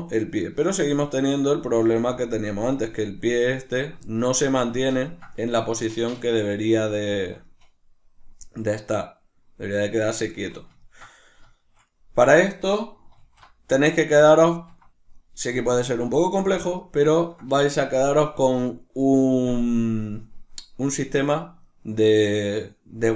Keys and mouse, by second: 0.2 right click, 0.7 right click, 1.1 right click, 1.8 g, 2.8 right click, 3.6 right click, 4.0-13.2 shift+middle drag, 13.2 alt+q, 16.0 shift+middle click.